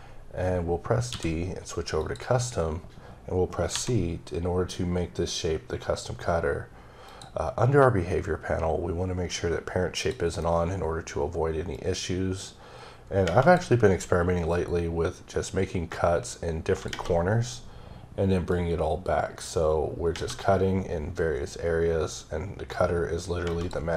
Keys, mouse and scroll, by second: 1.1 d, 2.0 click, 3.7 c, 7.0 click, 9.9 click, 11.7 click, 14.5 click, 18.5 click, 22.1 click.